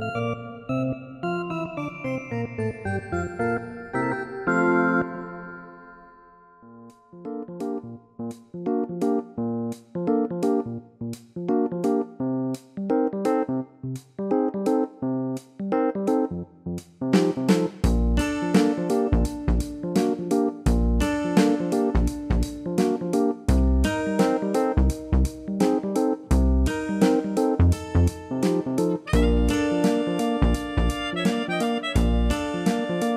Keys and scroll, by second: 4.5 ctrl+z, 18.1 ctrl+z.